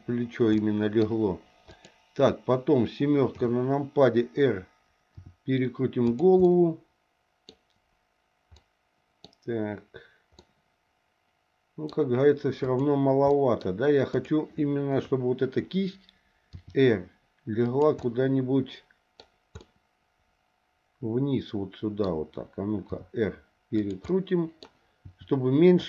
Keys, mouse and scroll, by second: 0.6 middle click, 1.7 click, 3.3 KP_7, 5.1 r, 6.4-7.5 middle drag, 8.6 middle click, 10.4-11.9 middle drag, 11.9-12.6 scroll down 1, 12.6 click, 13.3 middle click, 14.1 click, 14.9 KP_7, 16.5 r, 18.0-19.5 middle drag, 19.6-22.0 middle drag, 22.9 r, 24.1 middle click, 25.0 r.